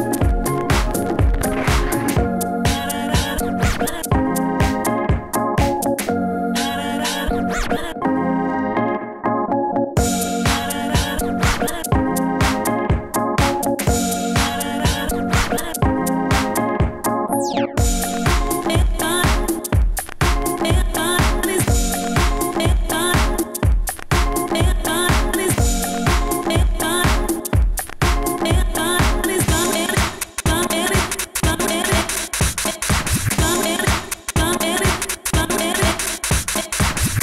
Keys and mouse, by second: 1.0 ctrl+z, 3.0 s, 6.3 s, 6.5 s, 6.8 middle click, 6.9 Tab, 7.2 Tab, 8.0 f, 8.5 f, 9.6 f, 10.8 f, 13.3 s, 14.0 Tab, 14.2 Tab, 14.8 ctrl+z, 15.1 s, 16.7 ctrl+z, 17.3 ctrl+z, 17.4 ctrl+z, 17.6 s, 18.4 f, 18.9 s, 19.1 Tab, 19.2 Tab, 20.8 f, 21.0 s, 21.9 s, 23.2 s, 23.9 f, 24.0 s, 25.0 s, 28.6-29.0 drag, 28.9 s, 29.0 f, 29.4 f, 30.1 ctrl+z, 30.4 ctrl+z, 30.5 shift+f, 32.6 f, 34.7 s, 35.6 f.